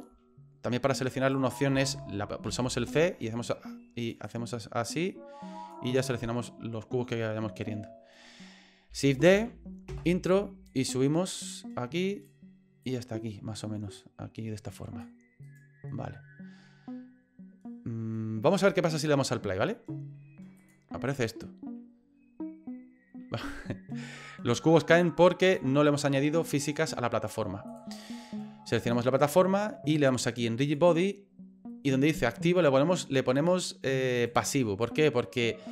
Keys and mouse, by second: 1.2 right click, 2.5 c, 9.3 shift+d, 10.6-12.2 drag, 12.8-15.0 drag, 15.4 right click, 18.8 middle click, 20.6 click, 25.5 click, 27.7 click, 28.8 right click, 30.7 click, 34.3 click.